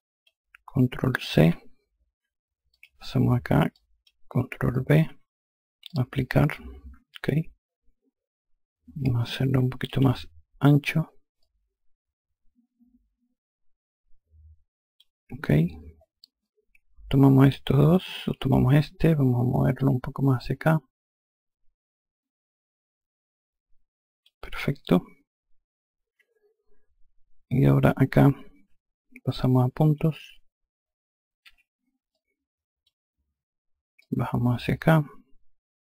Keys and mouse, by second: 2.2 click, 5.4 click, 10.9 click, 17.9 click, 19.3 e, 20.1 click, 30.9 5, 31.6 click, 33.5 click.